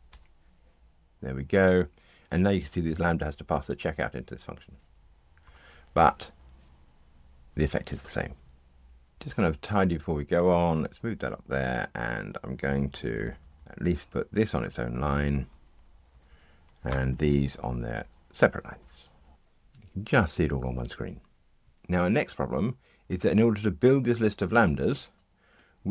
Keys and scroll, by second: 5.4 ctrl+r, 16.8 alt+Return.